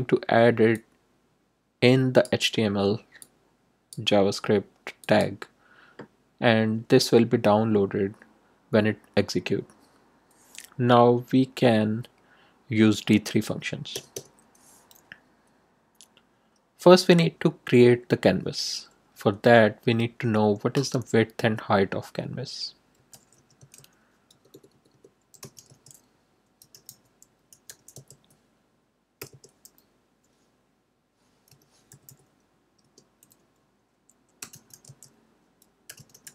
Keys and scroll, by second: 13.9 Return, 22.7-29.3 typing, 31.4 8, 31.8 0, 32.8 Return, 34.1-36.3 typing.